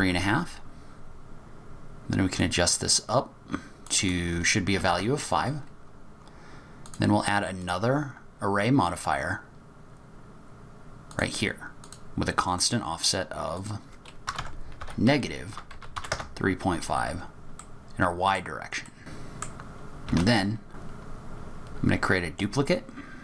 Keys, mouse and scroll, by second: 0.4-0.9 scroll down 3, 0.7 scroll up 1, 2.3 click, 3.9 click, 6.8 click, 9.5-11.1 scroll down 4, 11.1 click, 11.8 click, 12.5 click, 13.5 click, 17.1-17.5 scroll down 4, 17.5 middle click, 18.8 middle click, 19.2 scroll up 8, 19.4 click, 19.5 middle click, 20.1 shift+d.